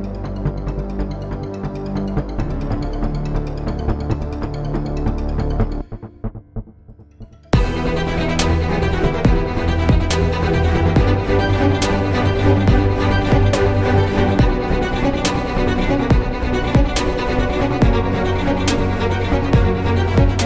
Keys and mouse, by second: 0.2 c, 1.7 i, 6.1 x, 8.9 z, 10.6 ctrl+z, 11.2 z, 12.9 c, 14.3 w, 15.8 z, 16.1 Tab, 17.7 Tab, 18.2 z, 19.5 w, 20.2 z.